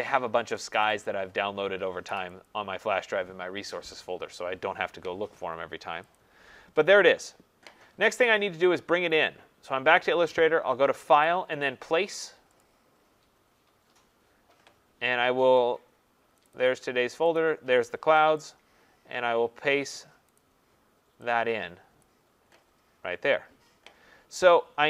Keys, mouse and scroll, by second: 0.9 click, 1.1 click, 2.5 click, 7.1 click, 11.3 click, 16.3 click, 16.7 click, 17.4 click, 18.5 click, 20.4 click, 22.0 click.